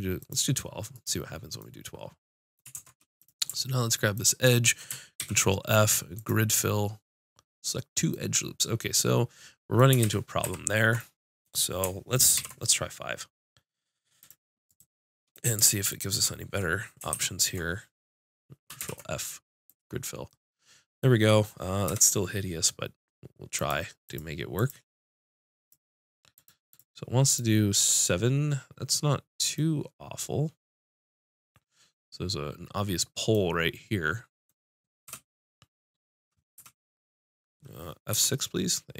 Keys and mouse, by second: 1.6-4.2 drag, 2.7 ctrl+Tab, 5.2 ctrl+f, 10.0 ctrl+z, 10.4 ctrl+z, 12.4 ctrl+r, 15.1-17.1 drag, 16.2 right click, 17.1 ctrl+e, 18.8 ctrl+f, 21.9 F6, 35.1 F6, 36.6 F6, 38.1 F6.